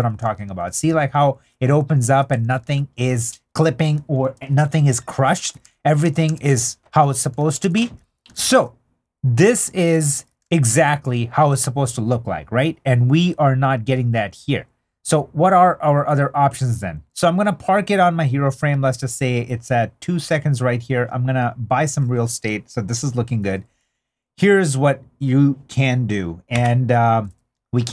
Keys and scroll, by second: 2.4 super+d, 5.4 super+d, 7.4 super+d.